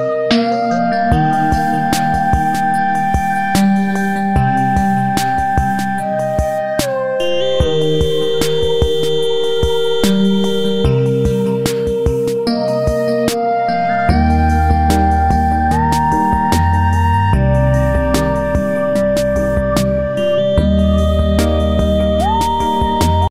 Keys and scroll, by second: 8.1 ctrl+z.